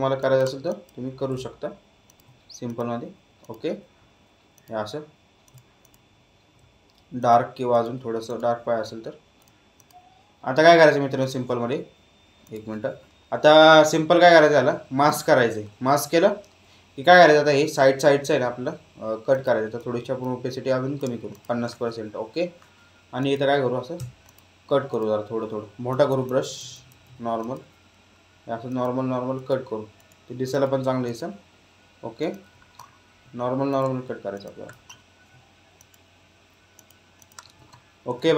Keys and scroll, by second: 23.9 x, 25.8 ].